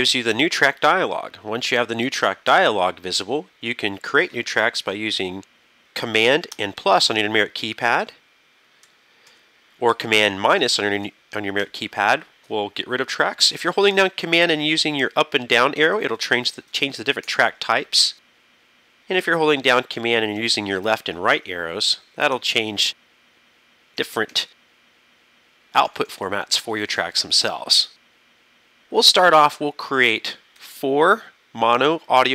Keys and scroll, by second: 0.1 shift+super+n, 7.1 super+KP_Add, 8.9 super+KP_Add, 10.6 super+KP_Subtract, 11.6 super+KP_Subtract, 15.8 super+Down, 17.3 super+Up, 20.4 super+Left, 21.4 super+Right, 24.6 super+Left, 30.6 KP_4.